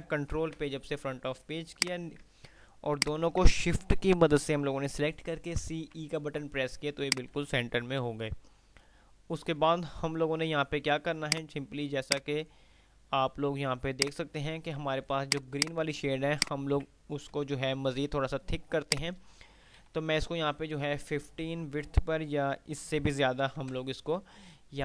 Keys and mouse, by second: 0.6 shift+Page_Up, 1.9 click, 2.6 shift+click, 5.5-6.4 typing, 7.3 click, 7.6 F3, 11.4 F2, 11.4 click, 13.8 click, 14.4 F2, 14.9 click, 16.6 alt+click, 17.6 F12, 19.1-19.8 drag, 23.8 F12.